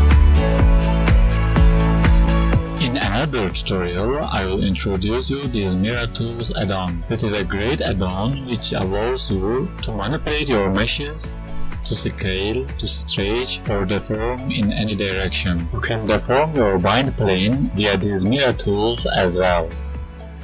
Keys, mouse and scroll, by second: 0.0 Tab, 0.3 Tab, 0.4 right click, 0.7 Tab, 0.9 Tab, 1.1 KP_1, 2.2 a, 2.4-3.5 scroll down 8, 3.5 click, 3.7 click, 4.3 click, 5.2 click, 11.9 right click, 12.8-13.4 scroll down 2, 13.4 right click, 14.3 Tab, 15.7 click, 15.9 right click, 16.2 click, 17.1-17.4 ctrl+z, 17.7 right click, 18.1 Tab, 18.3 right click, 19.8 r, 20.2 click.